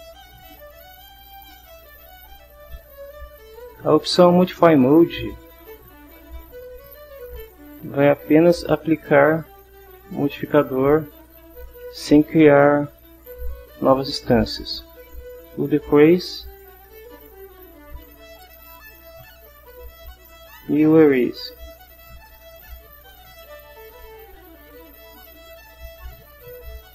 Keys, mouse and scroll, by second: 0.2-3.8 drag, 5.6 click, 7.8-10.2 right drag, 13.6 click, 15.2 click, 16.3-19.6 right drag, 20.5 click, 21.2-23.6 right drag, 24.9 click, 26.2 click.